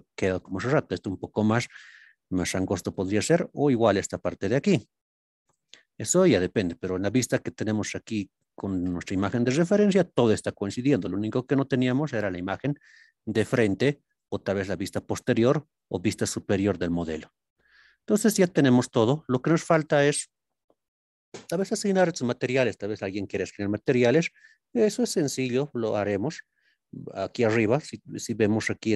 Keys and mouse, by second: 1.0 click, 2.8 click, 3.8 x, 5.1 drag, 5.8-6.5 middle drag, 7.0 ctrl+KP_3, 9.7 shift+middle click, 11.1-17.1 middle drag, 18.7 drag, 20.2 shift+middle click.